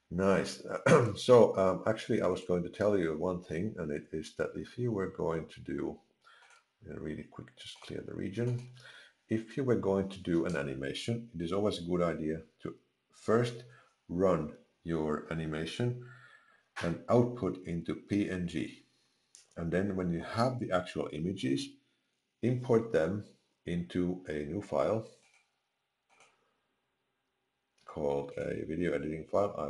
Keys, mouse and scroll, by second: 6.4 click, 25.2 click.